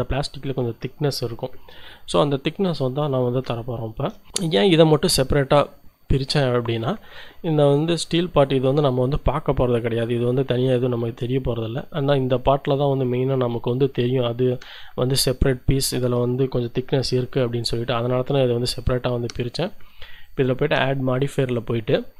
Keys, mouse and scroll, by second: 3.5 shift+click, 4.4 click, 7.8-9.0 right drag, 10.0-11.9 middle drag, 11.9 right click, 15.3-20.2 middle drag, 20.2 click, 20.6-22.1 middle drag.